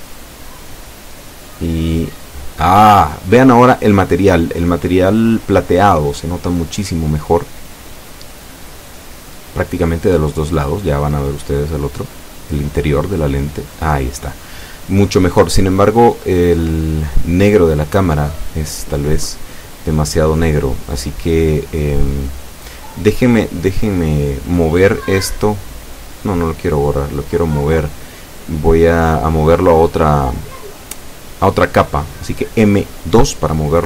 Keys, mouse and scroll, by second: 0.6 click, 2.1-5.2 drag, 7.7 F12, 28.7 Escape, 29.8-30.9 middle drag, 31.2-31.5 scroll down 1, 31.9 right click, 33.0 x.